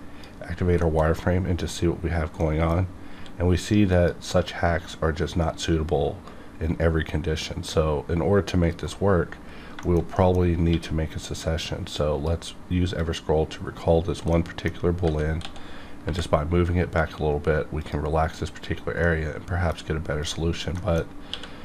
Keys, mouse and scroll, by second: 0.8 shift+middle click, 1.2 middle click, 2.4 middle click, 2.8 scroll up 1, 3.1 q, 3.9 click, 4.8-6.7 scroll up 1, 8.7 right click, 9.0 scroll down 1, 9.8 shift+middle click, 10.1 middle click, 10.7 q, 12.0 click, 14.3 middle click, 15.0 g, 15.4 x, 16.0 y, 17.8 click, 19.0 middle click, 20.2 click, 20.8 shift+middle click, 21.0 shift+scroll up 1, 21.3 q.